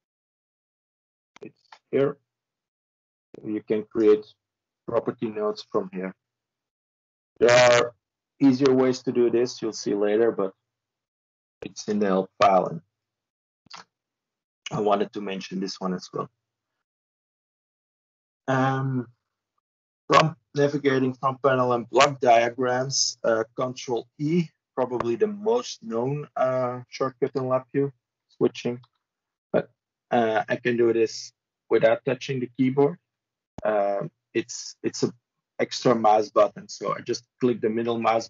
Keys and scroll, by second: 28.3 ctrl+e, 28.6 ctrl+e, 31.0 ctrl+e, 32.0 ctrl+e.